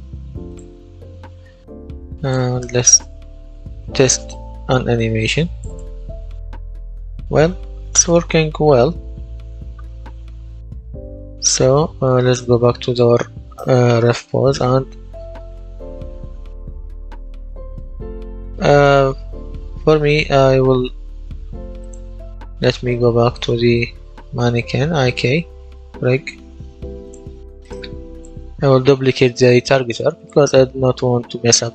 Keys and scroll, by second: 7.0 a, 7.5 w, 8.7 w, 9.0 s, 10.1 w, 10.7 s, 13.8-17.7 typing.